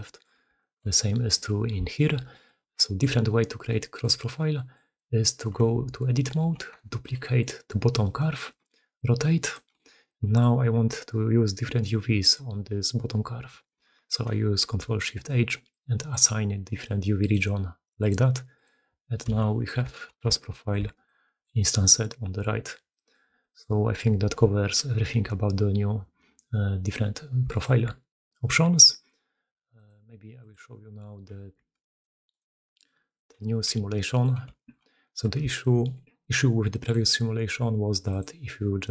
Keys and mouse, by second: 0.4 shift+middle drag, 1.1 middle click, 1.7 alt+middle click, 2.1 middle click, 2.7 shift+middle click, 5.4 Tab, 6.8 shift+d, 8.3 r, 9.7-10.3 shift+right drag, 10.6 g, 14.3 ctrl+shift+h, 19.9 shift+click, 20.3 Tab, 20.3 drag, 20.7 shift+drag, 21.1 drag, 22.7 drag, 23.2 click, 27.5 alt+drag, 29.6 click, 30.3-31.6 drag, 31.8 alt+shift+click, 32.2-33.0 alt+shift+drag, 34.4 shift+drag, 34.9 drag, 35.4 alt+click, 35.6 middle click, 38.0-38.9 drag.